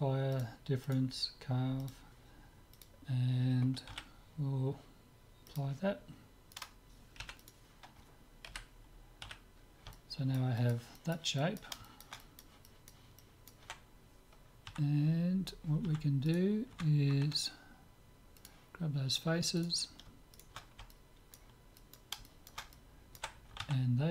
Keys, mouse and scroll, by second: 4.0 z, 5.5-7.2 drag, 6.5-8.5 right drag, 7.2 Delete, 8.5 KP_7, 9.3 z, 9.6-15.0 middle drag, 14.7 Tab, 15.9 Tab, 16.3-18.2 right drag, 16.9 Tab, 18.4-20.1 drag, 19.6-22.2 right drag, 20.9-22.0 drag, 22.2-24.1 middle drag.